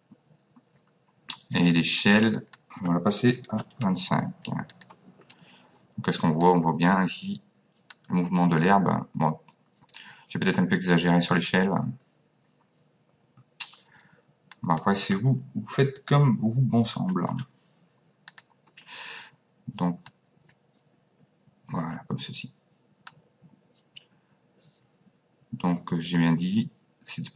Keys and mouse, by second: 2.3 click, 3.5 KP_2, 3.7 KP_5, 4.7 click, 6.5 click, 14.5 click, 17.0 KP_2, 18.3 click, 20.1 click.